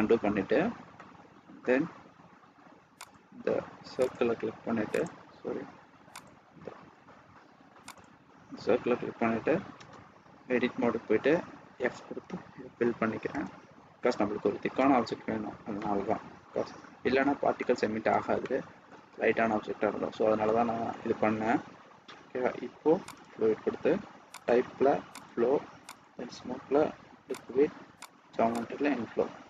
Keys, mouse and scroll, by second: 0.0 scroll down 1, 0.4 scroll up 2, 0.9 middle click, 3.0 click, 4.2 click, 6.0 click, 6.9-7.8 scroll up 2, 7.8 click, 9.7 Tab, 11.7 f, 13.4 Return, 14.7 Tab, 15.7 middle click, 16.8 scroll down 1, 17.5 middle click, 18.3 shift+middle click, 23.2 click, 24.3 click, 27.9 click, 29.0 scroll up 1, 29.2-29.4 scroll down 1.